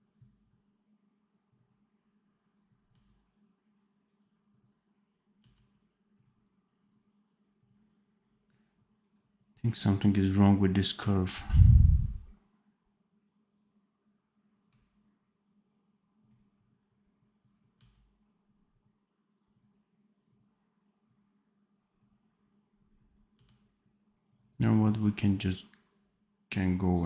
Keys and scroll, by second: 2.8 d, 5.3 d, 17.7 d, 23.2 d.